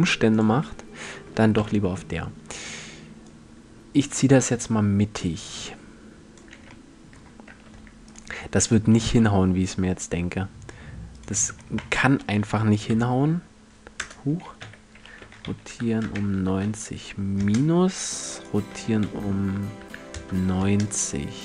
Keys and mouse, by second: 1.2 KP_1, 1.8-2.8 middle drag, 7.1 Tab, 8.7 r, 10.8-12.8 drag, 11.1 r, 14.8 r, 18.0-19.7 drag, 18.3 r.